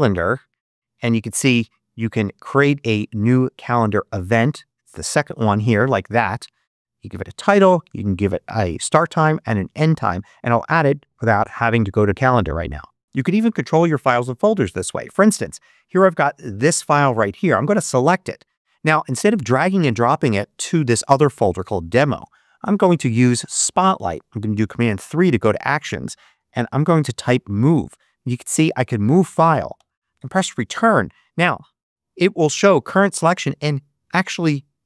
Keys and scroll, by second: 3.7 Down, 5.3 Return, 22.7 super+space, 24.4 super+3, 26.0-27.4 typing, 29.6 Return.